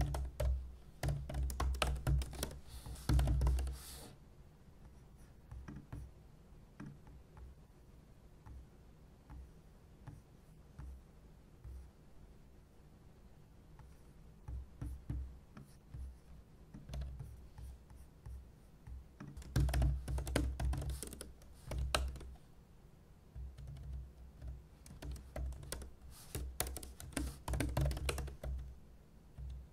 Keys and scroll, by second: 0.0-4.1 typing, 16.9 super+c, 19.3-21.4 typing.